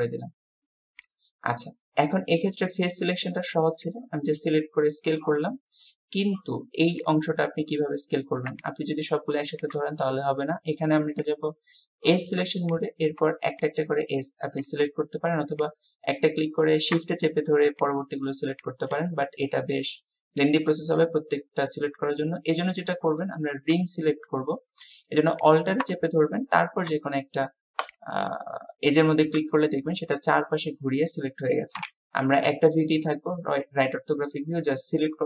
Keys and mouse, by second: 1.6-2.6 drag, 3.4 click, 19.1-21.8 drag, 22.2 click, 30.0 middle click, 31.9 KP_3.